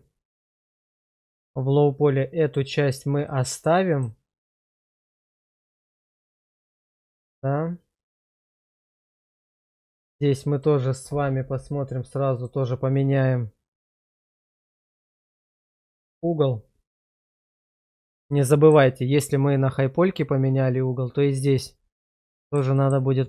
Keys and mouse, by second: 2.4 click, 3.3-4.0 middle drag, 5.4-6.4 middle drag, 7.1 middle click, 9.6 middle click, 12.3-15.0 drag, 18.3 shift+middle click, 22.2-22.5 middle drag, 22.8 shift+middle click.